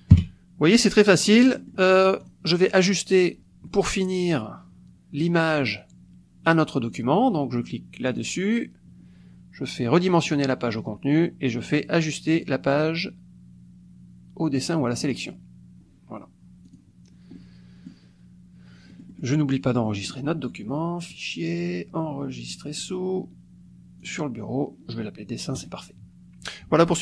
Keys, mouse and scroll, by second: 0.1 KP_5, 1.1 click, 1.3 middle click, 2.2 click, 8.1 click, 10.3-12.4 drag, 15.0 click, 16.6 click, 17.3 click, 18.9 click, 19.9 middle click, 19.9-20.3 scroll up 2, 21.0 click, 22.5 click, 24.0 click, 25.5 click.